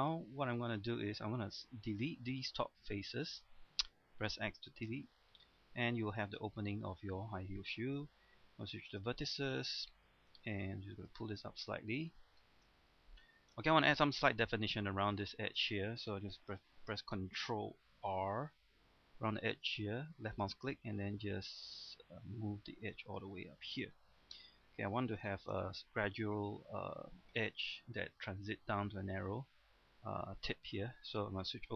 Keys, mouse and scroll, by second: 0.6 scroll up 1, 0.8 middle click, 1.9 right click, 2.9 shift+right click, 3.3 middle click, 4.3 x, 5.0 click, 5.4 middle click, 6.2 scroll down 1, 6.4 middle click, 6.9 scroll up 1, 7.2 middle click, 8.9 ctrl+Tab, 8.9 click, 9.5 right click, 10.1 click, 11.3 middle click, 12.8-13.2 scroll up 1, 13.2 middle click, 14.8 middle click, 15.3 shift+middle click, 16.9 scroll down 1, 17.2 middle click, 18.2 ctrl+r, 20.3 click, 23.4 middle click, 24.4-25.0 scroll up 1, 25.0 scroll down 1, 25.3 shift+middle click, 26.6-27.2 scroll up 1.